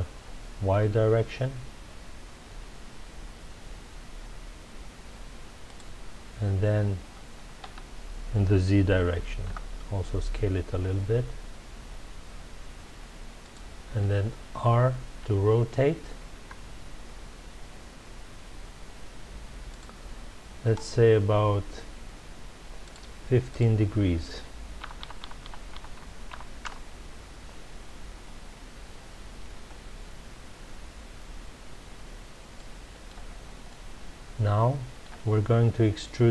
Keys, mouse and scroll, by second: 5.7 click, 7.6 s, 13.5 click, 16.3 r, 19.7 click, 22.8-24.9 drag, 24.9 BackSpace, 26.7 Return, 28.3 scroll up 1, 31.8 scroll down 1, 32.5-33.3 middle drag, 33.3-33.6 scroll down 1, 33.6-36.3 middle drag.